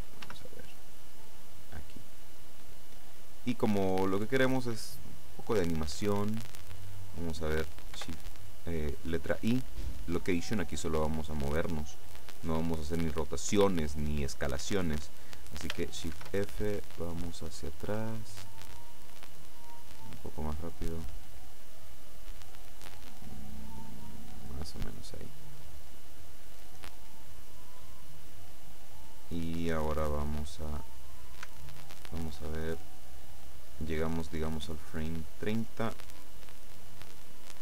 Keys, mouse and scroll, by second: 0.3 g, 2.5 click, 8.0 i, 10.2 click, 16.2 shift+f, 16.7-17.0 scroll down 2, 18.0-19.0 scroll down 4, 19.2-19.6 scroll down 2, 21.1 click, 35.2 click.